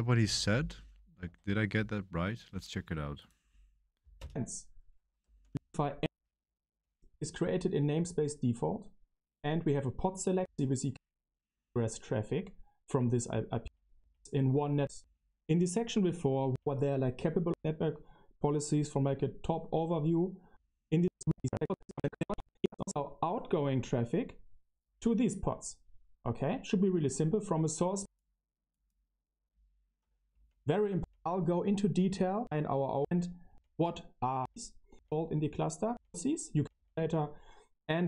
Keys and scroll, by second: 0.0-1.0 typing, 1.0 super+1, 1.0 super+2, 1.2 super+3, 4.1 space, 5.2-6.7 typing, 8.7 typing, 10.3 Left, 10.8-11.7 typing, 13.6 Right, 13.9 Right, 14.7 Right, 14.9 Right, 16.4 Right, 17.4 Left, 20.4 Left, 20.9-22.2 typing, 22.3 Left, 22.4 Left, 22.6 Left, 22.7 Left, 22.8 Left, 24.8 BackSpace, 30.3 Delete, 30.9 Right, 32.3 Right, 32.3 Right, 32.9 Right, 33.5 Right, 35.8 Tab, 36.5 Tab, 36.6 Tab.